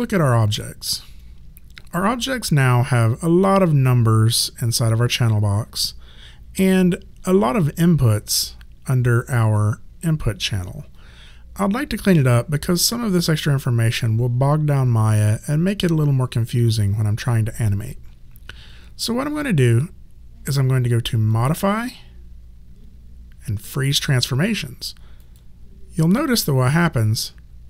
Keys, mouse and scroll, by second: 0.8 click, 21.3 click, 25.2 click.